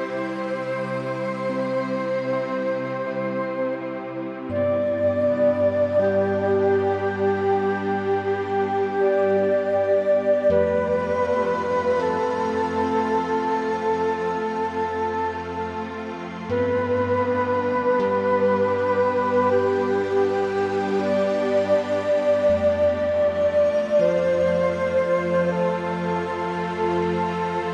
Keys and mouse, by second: 0.6 Escape, 0.6 `, 0.8 click, 1.6 click, 2.5 shift+middle click, 3.6-5.2 drag, 6.2 click, 7.0 g, 7.6 z, 10.2 click, 11.0 Tab, 11.1 click, 12.5 click, 12.9 middle click, 13.3 middle click, 14.6 middle click, 15.3 Tab, 15.6 middle click, 16.6 middle click, 16.8 Tab, 17.0 Tab, 18.0 click, 19.0 2, 19.2 click, 19.6 middle click, 20.6 click, 21.0 typing, 21.7 shift+click, 21.9 middle click, 23.0 shift+click, 23.8 g, 24.7 z, 25.3 Escape, 25.9 middle click, 27.0 middle click.